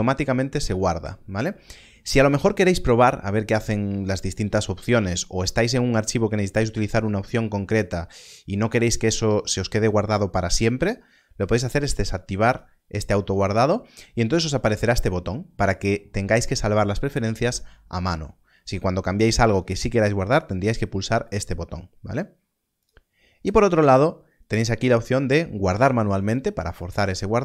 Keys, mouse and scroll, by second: 12.2 click, 21.2 click.